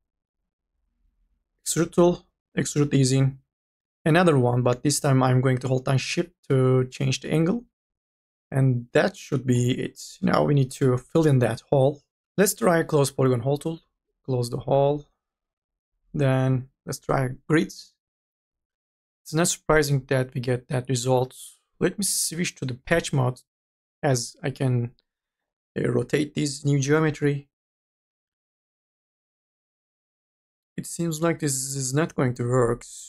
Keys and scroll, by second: 3.9 ctrl+z, 12.1 e.